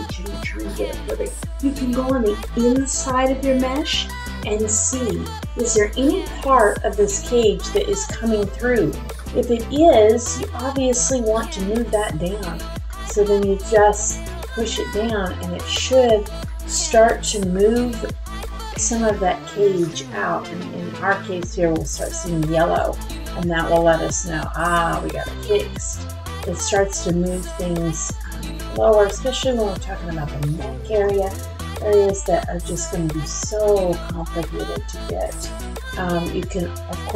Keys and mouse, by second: 5.5 middle click, 6.2 shift+middle click, 7.4 middle click, 9.2 middle click, 10.7 click, 12.1 shift+middle click, 12.8 middle click, 14.0 shift+middle click, 14.5 middle click, 16.2 middle click, 20.4 click, 21.9-23.9 middle drag, 22.6-23.9 drag, 24.6 shift+middle click, 25.8 click, 28.1 middle click, 28.2-29.7 typing, 28.7 shift+middle click, 30.7 shift+middle click, 36.0 click.